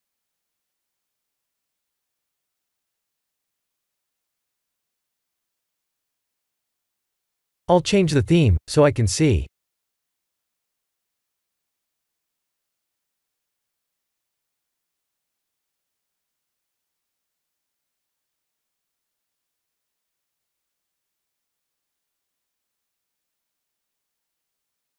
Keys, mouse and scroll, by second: 1.0 click, 1.5 click, 8.2 click, 15.1-16.7 scroll up 6, 16.7-18.0 scroll up 1, 16.7 h, 18.6 alt+h, 19.1 g, 23.3 click, 24.0 click, 24.4-24.8 scroll down 4, 24.8 shift+middle click.